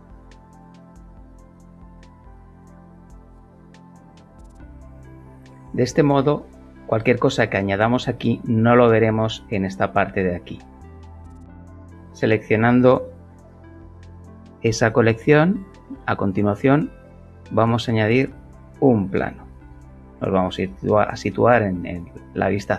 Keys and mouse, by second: 2.4 click, 4.6 click, 11.9 click, 16.4 a, 17.9 click, 19.6 KP_7, 21.6 middle click, 21.9 middle click, 22.5-22.7 shift+middle drag.